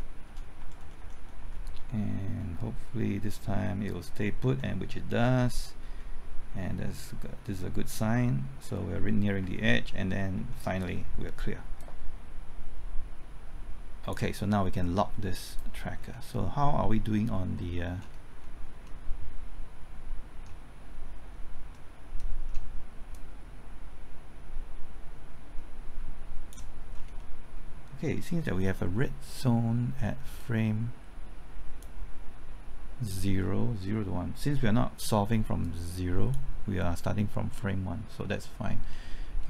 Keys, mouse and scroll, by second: 0.0-1.0 typing, 0.6 alt+Right, 11.8-15.1 drag, 16.0 scroll down 1, 16.3 middle click, 16.8 scroll down 1, 16.9-17.3 scroll up 1, 17.6 middle click, 18.0-18.6 scroll down 1, 18.6-18.9 scroll up 1, 18.9-21.1 middle drag, 21.3-21.7 scroll down 1, 21.7-23.1 middle drag, 23.1-26.9 drag, 26.9 scroll down 1, 27.2 middle click, 30.4-37.1 drag, 38.9 middle click.